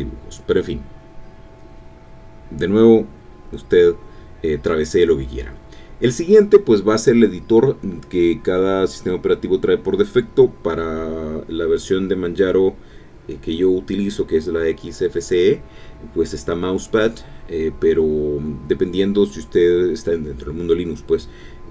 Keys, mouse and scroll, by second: 0.7 click, 4.7 alt+F2, 5.2-6.4 typing, 9.3 alt+space, 9.4 alt+n, 12.5 click, 14.1 click.